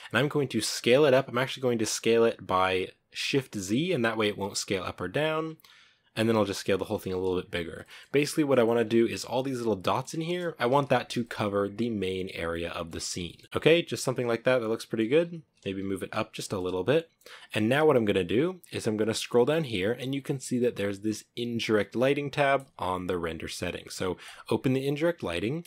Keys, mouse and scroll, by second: 0.3 s, 6.7 s, 7.7-8.7 middle drag, 8.7 scroll up 1, 8.8-9.9 middle drag, 9.9 scroll down 4, 10.2 middle click, 10.5 s, 11.0 g, 12.4-13.1 middle drag, 13.1 g, 13.4 g, 13.5-15.0 middle drag, 15.0-15.5 scroll up 3, 15.5 g, 16.5-25.6 middle drag.